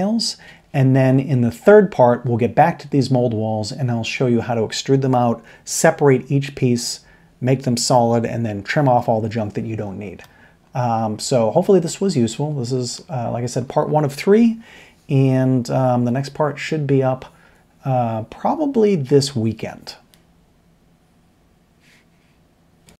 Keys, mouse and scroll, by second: 10.2-12.3 middle drag, 12.3 click, 12.5 middle click.